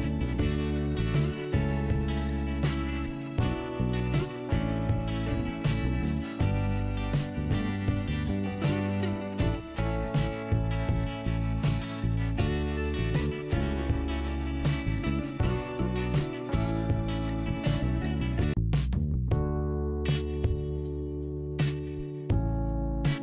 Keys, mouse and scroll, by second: 0.7 click, 3.5 click, 4.7 click, 9.2 scroll down 2, 10.2-10.5 scroll up 2, 11.0 click, 12.8 click, 15.4 click, 16.9 click.